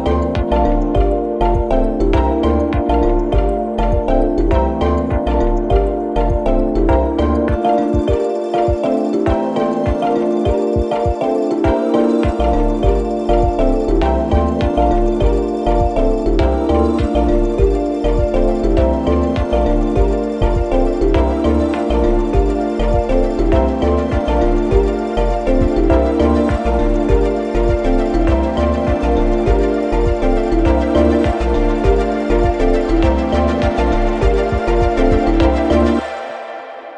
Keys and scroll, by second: 0.3 3, 11.1 4, 22.2 1, 25.5 4, 27.5 3, 29.2 4.